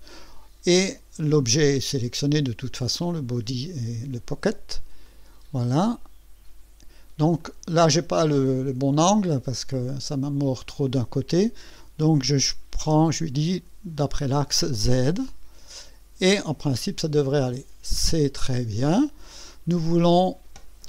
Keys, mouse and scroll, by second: 5.0 click, 7.4-10.7 drag, 12.2 click, 14.8 click, 16.6-19.1 drag, 19.9 click.